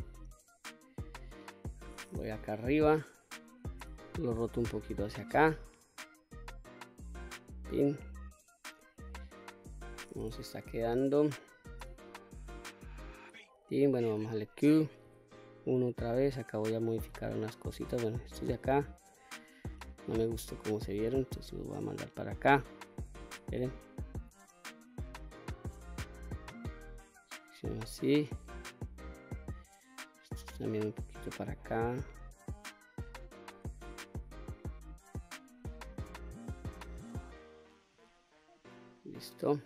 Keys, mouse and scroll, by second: 0.0-1.6 middle drag, 2.2 KP_7, 3.6 r, 6.7 click, 7.2-8.5 middle drag, 8.9 middle click, 10.4 KP_1, 11.6 r, 12.7 click, 14.0 q, 14.8 1, 17.8-19.5 drag, 20.1-21.8 drag, 23.2 ctrl+z, 24.3 click, 25.8-27.4 drag, 28.3-29.4 drag, 30.1-31.2 drag, 32.0-33.2 drag, 34.0 q, 36.3-37.7 drag, 38.4 click.